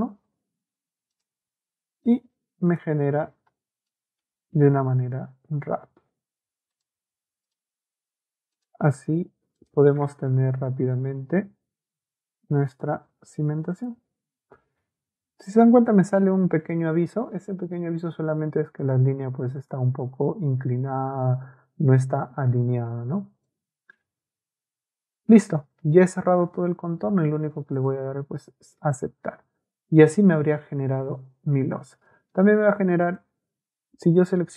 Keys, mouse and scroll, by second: 1.1 click, 2.1 click, 2.7 click, 3.9 middle click, 6.7 click, 7.5 click, 8.5 click, 9.6 click, 12.7 click, 13.7 click, 16.7 Escape, 16.9 Escape, 17.1 Escape, 17.6-18.6 typing, 18.8 right click, 19.6 right click, 23.2 middle click, 26.6 Escape, 27.7 click, 29.7 Escape, 33.0 click.